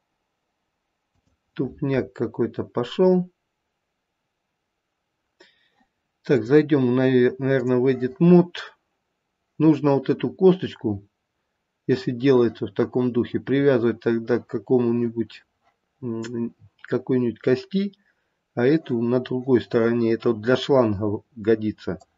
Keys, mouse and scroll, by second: 6.6 click.